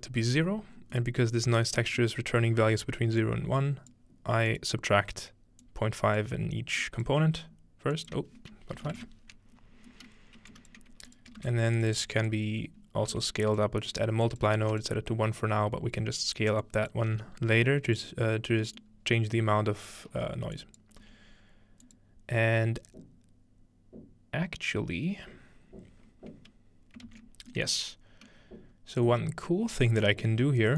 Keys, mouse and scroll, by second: 1.1 middle click, 1.5 click, 3.2 click, 4.5 click, 5.6 click, 6.8 click, 8.0 click, 8.8 ., 10.5 click, 11.1 click, 11.4 shift+d, 11.5 shift+click, 11.9-12.3 shift+drag, 13.6 click, 14.4 click, 14.7 1, 14.9-15.6 drag, 16.6 click, 17.1 g, 17.9 click, 18.3 scroll down 1, 19.4 scroll down 1, 20.6-20.9 drag, 21.0 g, 21.9 click, 27.1 typing, 27.7-29.5 middle drag, 28.3-29.1 scroll down 1, 29.5 scroll, 30.5-30.7 scroll up 1, 30.6-30.7 middle drag.